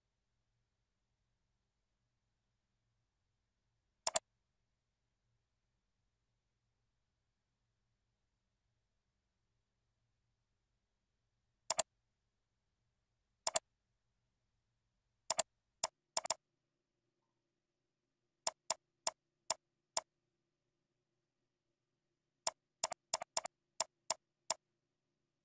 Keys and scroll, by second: 15.1 ctrl+c, 15.9 ctrl+v, 17.2 ctrl+b, 17.9 shift+F3, 22.1 ctrl+b.